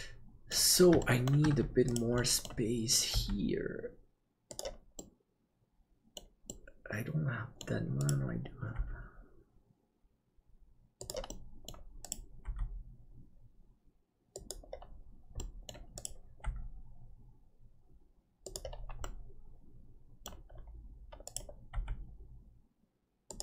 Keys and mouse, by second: 0.0 middle click, 1.1 shift+middle click, 2.1 middle click, 3.1 g, 5.1-7.7 middle drag, 8.1 right click, 8.7 g, 11.2 middle click, 12.4 g, 15.4 middle click, 16.1 right click, 16.4 g, 19.0-20.4 middle drag, 21.7 g.